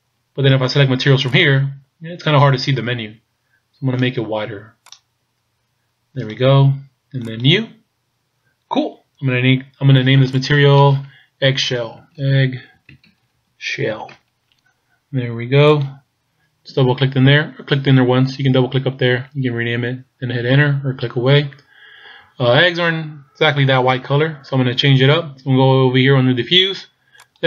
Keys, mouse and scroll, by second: 0.1-1.3 scroll down 1, 1.3 click, 4.9 click, 7.3 click, 10.4 click, 12.0 g, 13.9 l, 27.2 click.